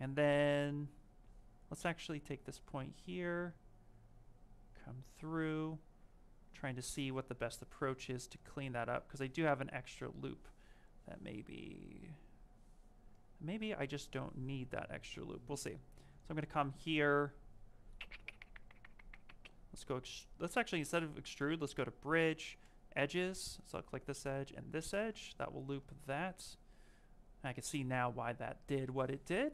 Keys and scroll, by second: 16.2 space.